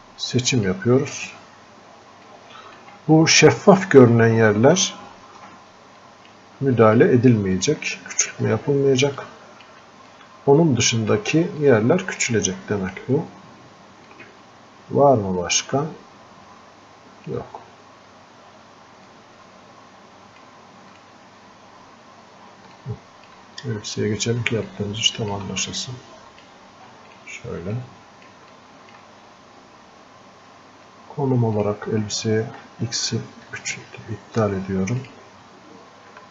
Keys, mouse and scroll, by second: 10.4-11.9 drag, 11.9-14.4 alt+drag, 14.4-36.3 drag, 23.1 alt+click, 25.0 alt+click, 26.1 click, 28.1 click.